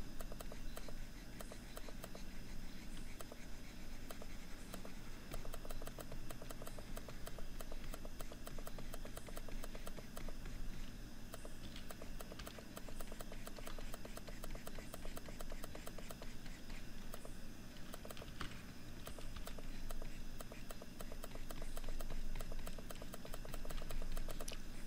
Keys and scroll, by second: 17.7 ctrl+=.